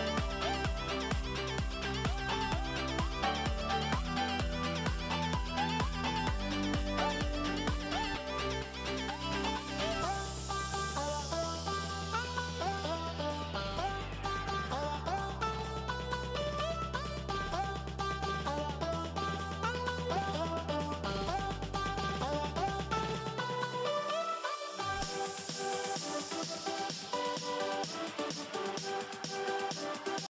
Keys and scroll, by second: 1.2 a, 2.5-6.0 typing, 9.2-9.5 typing, 11.6 n, 13.0 a, 14.6 a, 20.9 a, 23.4 -, 24.6 -, 24.9 -, 25.5 a.